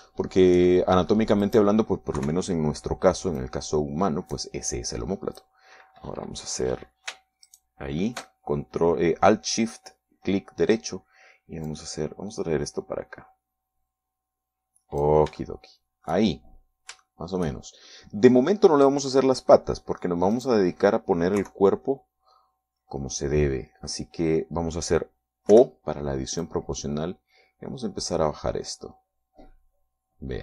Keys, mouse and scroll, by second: 0.3 scroll down 1, 1.2-2.4 shift+middle drag, 2.6 right click, 3.4 KP_3, 4.6-6.8 drag, 12.8-16.4 drag, 16.6 shift+middle click, 17.8 scroll down 1, 18.2 shift+middle click, 20.2-21.4 middle drag, 22.6 KP_3, 26.7 o, 27.6-28.9 drag, 28.9-29.8 scroll down 2.